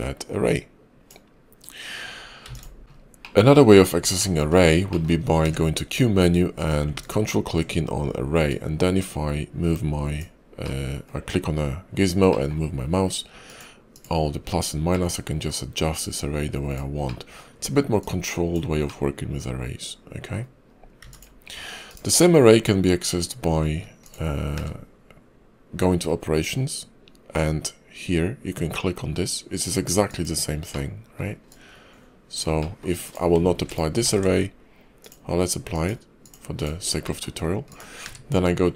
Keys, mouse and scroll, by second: 2.3 x, 2.8 n, 5.3 q, 24.4 q, 33.9 ctrl+`, 37.9 q.